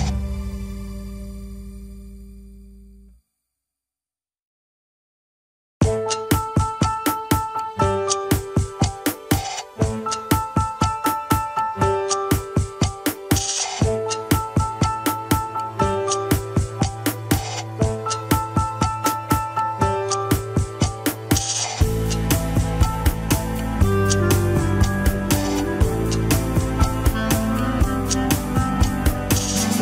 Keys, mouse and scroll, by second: 0.0 alt+z, 0.5-1.6 drag, 1.6 middle click, 2.0-2.3 scroll up 1, 2.3 alt+z, 2.7 alt+z, 3.0-4.2 drag, 4.2 middle click, 4.8-5.2 scroll down 2, 5.5 KP_1, 5.7 scroll up 2, 6.4 ctrl+KP_1, 7.0 alt+z, 8.2 ctrl+click, 9.2 ctrl+click, 11.2 alt+z, 11.7-13.6 drag, 13.6-14.1 scroll down 2, 14.1-16.2 drag, 16.2 middle click, 17.0-18.1 drag, 18.1 KP_1, 18.7-20.0 drag, 20.0 middle click, 20.5 click, 21.0-22.0 middle drag, 22.0 click, 22.5 middle click, 22.7 scroll down 1, 23.3 click, 24.1 KP_1, 24.6-25.0 scroll up 1, 25.0 shift+middle click, 25.4 alt+z, 26.9 ctrl+click, 27.8 ctrl+click, 28.7 alt+z, 28.9-29.8 middle drag.